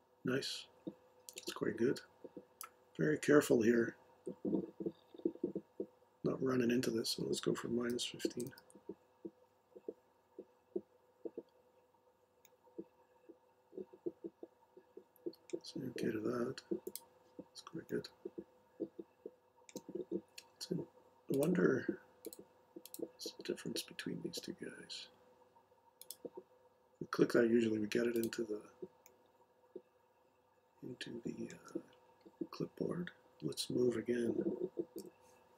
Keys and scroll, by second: 7.6-8.9 typing, 35.0 m.